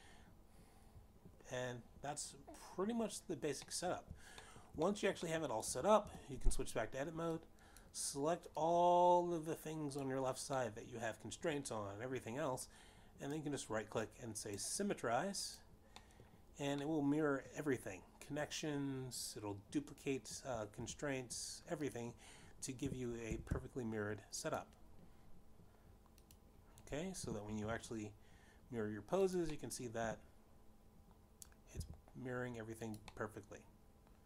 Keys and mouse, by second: 0.8 shift+middle click, 1.3 middle click, 6.1 middle click, 6.9 shift+middle click, 7.3 middle click, 7.8 middle click, 8.1 Tab, 9.8 click, 13.1 middle click, 15.8 right click, 17.8 click, 18.6 middle click, 19.4 middle click, 23.2 Tab, 24.5 click, 25.3 g, 25.5 x, 25.9 x, 26.8 click, 28.7 click, 29.8 g, 29.8 x, 31.8 click, 32.1 middle click, 32.6 r.